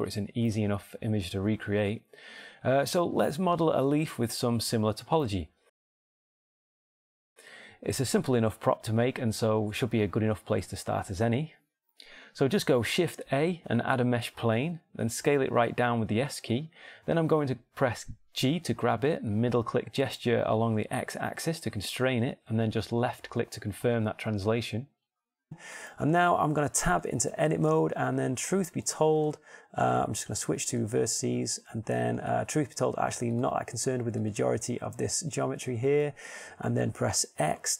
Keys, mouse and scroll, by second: 6.0 Tab, 6.5 Tab, 7.0 middle click, 15.3 shift+a, 18.3 s, 20.4-21.7 shift+drag, 21.1 g, 27.9 Tab, 29.5 ctrl+Tab, 32.5 click.